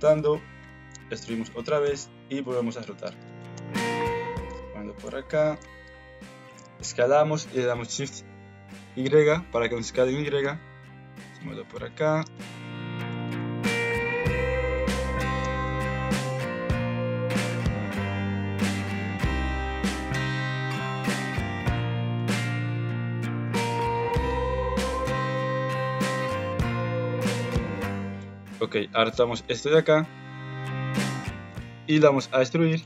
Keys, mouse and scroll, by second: 0.6 e, 1.8 r, 2.5 s, 3.5 g, 4.5 s, 10.2 g, 12.3 click, 13.4 alt+z, 13.7 click, 15.3 g, 19.4 click, 20.0 g, 21.2 click, 21.6 g, 22.4 alt+z, 23.6 alt+z, 23.8 alt+click, 24.1 alt+z, 24.3 g, 25.9 middle click, 26.7 Tab, 27.0 middle click, 27.7 KP_1, 28.1 alt+z, 28.5 Tab, 29.0 click, 29.5 shift+click, 30.9 g, 31.9 e.